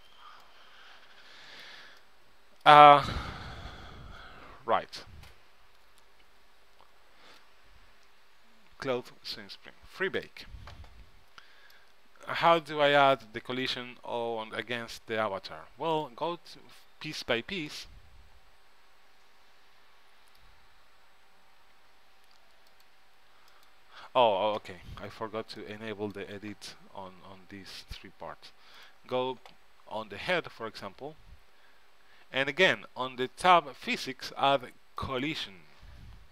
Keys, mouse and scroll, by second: 10.3-12.0 drag, 11.9 middle click, 16.1-19.0 drag, 21.8 Tab, 22.1 Tab, 22.8-24.6 drag, 25.7-27.6 drag, 28.9-30.6 drag, 30.4 middle click, 30.4 right click, 32.1 middle click, 32.8-34.5 drag, 34.6 middle click, 35.1-36.3 drag.